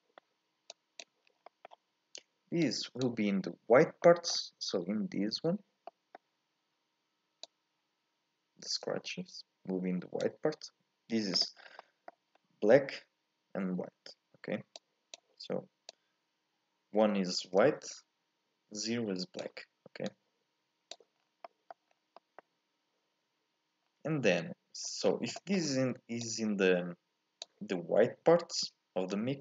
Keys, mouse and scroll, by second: 0.7 click, 2.7 click, 15.1 click, 20.9 click, 21.2-26.2 scroll down 1, 26.2 click, 29.1 click.